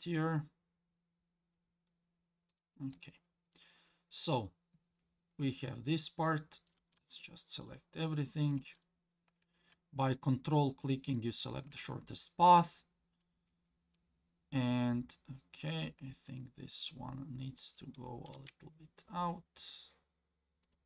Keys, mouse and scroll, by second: 0.0 g, 3.1-6.2 scroll down 2, 6.7 click, 7.2 shift+click, 7.6 shift+click, 8.8 ctrl+click, 11.1 ctrl+click, 15.1-17.1 scroll up 2, 17.6 click, 18.3 g.